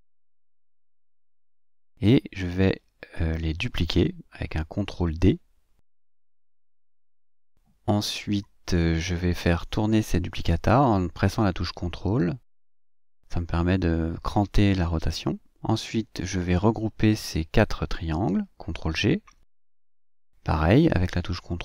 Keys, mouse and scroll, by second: 2.9 ctrl+g, 4.5 ctrl+scroll up 2, 5.1 ctrl+scroll up 2, 8.7 ctrl+d, 10.4 click, 11.5-14.2 ctrl+drag, 16.5 shift+click, 19.7 ctrl+g, 21.0 ctrl+d.